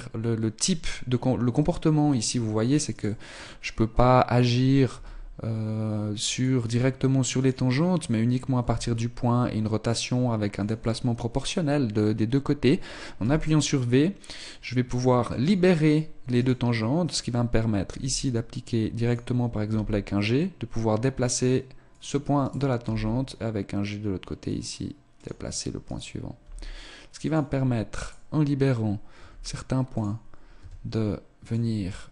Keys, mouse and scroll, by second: 2.9 right click, 4.9 r, 7.4 right click, 8.6 s, 13.2 v, 15.8 right click, 17.9 r, 19.7 g, 22.1 right click, 22.1 g, 25.3 click, 25.9 right click, 26.4 g, 27.3 click, 28.0 right click, 28.3 r, 30.6 s.